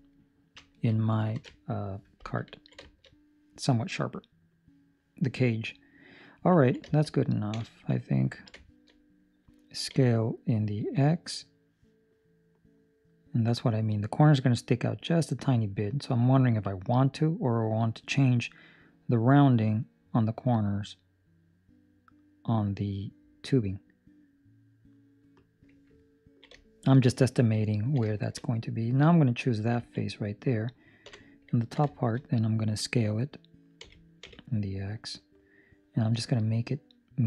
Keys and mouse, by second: 1.4 ctrl+alt+shift+6, 1.4 ctrl+alt+shift+5, 2.4 ctrl+middle click, 2.7 shift+middle click, 3.0 middle click, 3.9 middle click, 5.8 middle click, 6.5 ctrl+middle click, 6.8 shift+middle click, 7.4 KP_7, 8.2 ctrl+middle click, 8.5 shift+middle click, 9.8 s, 25.9 ctrl+middle click, 26.6 shift+middle click, 27.6 ctrl+middle click, 28.0 shift+middle click, 28.5 middle click, 29.2 right click, 29.7 ctrl+middle click, 31.0 KP_7, 31.5 ctrl+middle click, 31.8 shift+middle click, 33.7 s.